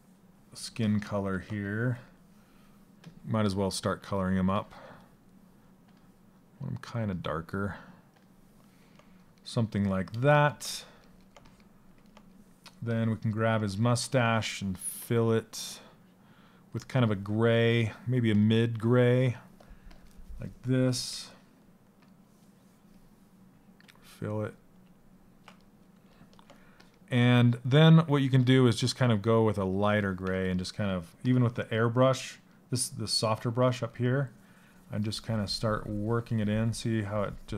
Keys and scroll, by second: 29.9 s.